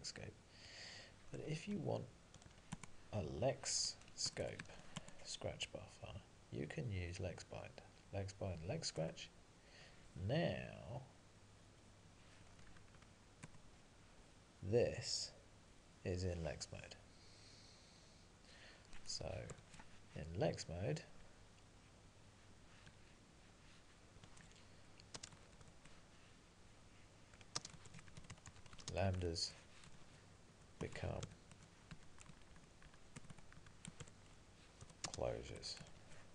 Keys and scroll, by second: 1.4 alt+x, 2.8 Tab, 9.0 Return, 12.5 alt+x, 12.7 Up, 13.4 Return, 30.8 Tab, 32.2 Left, 32.9 Left, 33.4 Tab.